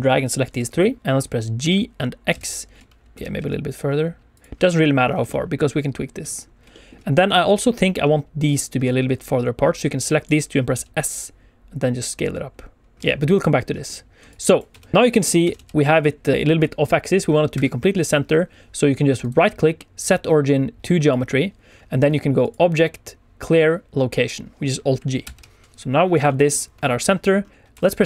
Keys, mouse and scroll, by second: 1.5 g, 2.2 x, 3.1 click, 3.1 shift+middle click, 3.1 scroll down 2, 3.3 x, 4.3 click, 4.9 scroll down 2, 5.2 shift+middle click, 6.3 scroll up 3, 6.6 shift+middle click, 7.8 click, 9.8 click, 10.7 s, 12.9 click, 12.9 scroll down 2, 13.1 shift+middle click, 13.8-14.2 scroll up 2, 14.2 click, 14.6 Tab, 14.8 middle click, 14.9 scroll down 1, 15.0 middle click, 15.3 r, 15.5 r, 17.5 Escape, 19.1 right click, 22.3 click, 25.2 alt+g, 25.6 KP_1, 25.9 scroll up 1, 26.2 shift+middle click, 27.3 scroll down 1, 27.6 Tab, 27.6 middle click, 27.7 Tab, 27.9 Tab.